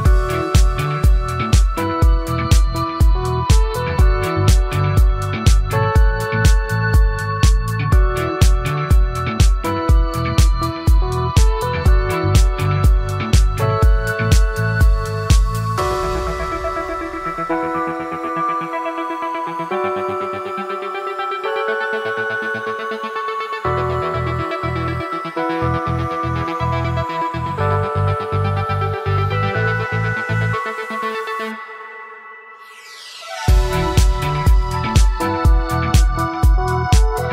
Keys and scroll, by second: 2.2 ctrl+z, 7.3 ctrl+z, 12.9 ctrl+z, 20.4 ctrl+z, 25.5 ctrl+z.